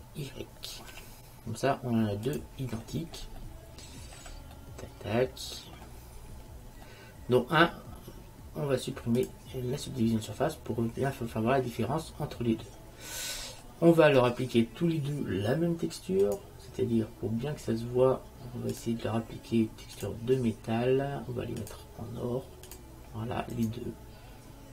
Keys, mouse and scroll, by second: 3.0-6.4 middle drag, 6.9-8.9 middle drag, 9.3-11.2 drag, 11.2-12.3 middle drag, 13.4 middle click, 13.9 click, 16.4-18.1 drag, 18.9-23.5 drag, 23.6 click, 23.7 middle click, 24.0-24.7 right drag.